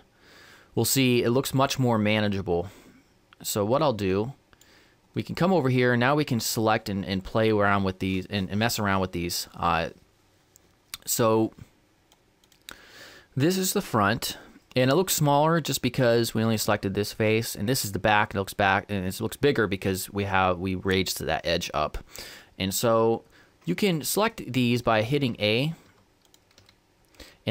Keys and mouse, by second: 3.9-16.2 drag, 26.3-27.5 drag, 26.3 a.